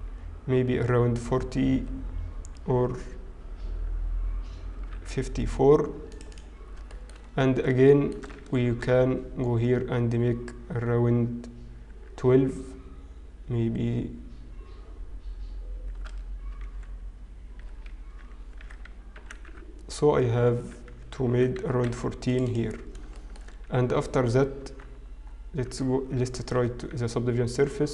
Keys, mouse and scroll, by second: 6.9 shift+middle click, 8.5 ctrl+r, 8.5 shift+middle click, 8.5-9.4 scroll up 8, 18.5 ctrl+r, 21.3 ctrl+r, 24.2 shift+middle click, 24.2-24.7 scroll down 5, 24.7 Tab, 24.7-25.6 scroll down 1, 25.6-26.6 scroll down 1, 26.6 ctrl+2, 26.9-27.7 scroll down 1.